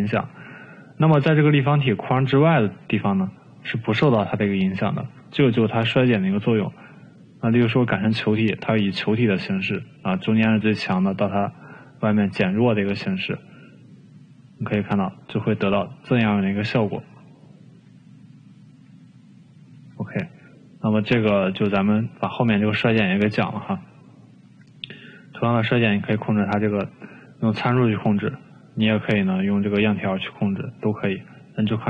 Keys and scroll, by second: 5.4 ctrl+z, 20.2 ctrl+z.